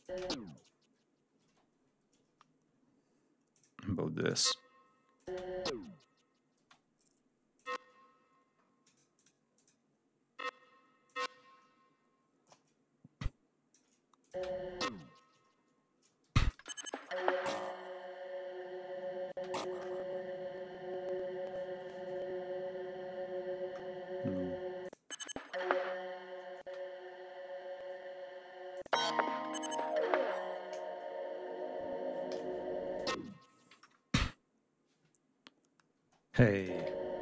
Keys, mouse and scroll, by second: 0.4 ctrl+scroll down 2, 1.3 ctrl+space, 2.1 ctrl+scroll up 2, 3.3 click, 4.1 click, 5.0 click, 5.1 space, 6.4 space, 7.4 click, 7.7-8.5 scroll up 1, 8.5 click, 9.2 click, 10.7 click, 11.0-11.3 ctrl+scroll down 1, 11.5-11.8 ctrl+scroll up 1, 12.8 alt+click, 13.8 alt+click, 13.9 space, 15.0-15.3 ctrl+scroll down 1, 15.8 space, 16.0 ctrl+click, 16.4 ctrl+scroll up 2, 18.9 space, 19.1 click, 19.4-20.9 scroll down 2, 22.7-23.4 scroll up 2, 24.1 click, 24.4 space, 25.9 space, 26.9-27.8 scroll up 2, 27.9 scroll up 2, 28.6 click, 28.9 space, 30.8 ctrl+scroll down 3, 31.5 scroll up 2, 32.2 ctrl+g, 33.5-34.0 scroll down 2, 34.2 scroll up 2, 34.9 scroll up 2, 35.4 scroll down 2, 35.9 space, 36.5 click, 36.6 space, 36.8 ctrl+scroll up 2.